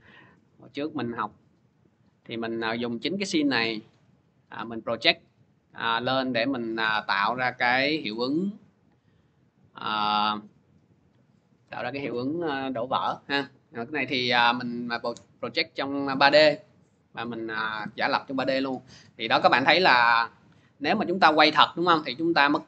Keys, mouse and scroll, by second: 1.0 click, 1.9 click, 18.4-22.6 drag.